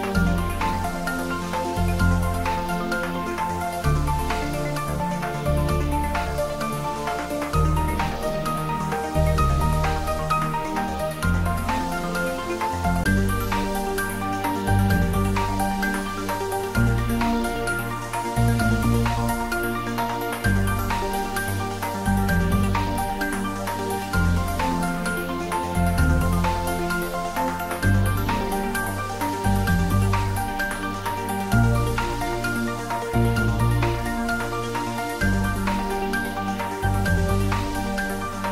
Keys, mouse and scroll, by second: 0.0-1.8 scroll up 1, 2.4 click, 16.5-19.6 click, 16.9-18.7 right drag, 18.7 right click, 19.7-21.6 scroll down 1, 22.7-24.5 scroll down 1, 26.1-27.8 drag, 31.0 r, 32.6-34.2 typing, 35.2-35.6 scroll down 1, 35.7-36.6 middle drag, 37.0-37.5 scroll up 1, 37.5-38.4 middle drag.